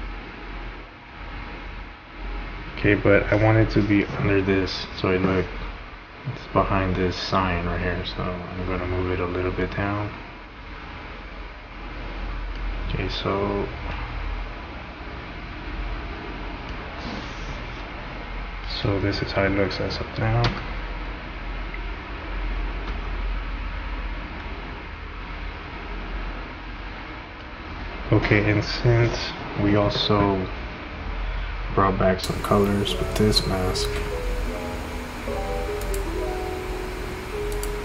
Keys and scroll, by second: 20.5 space.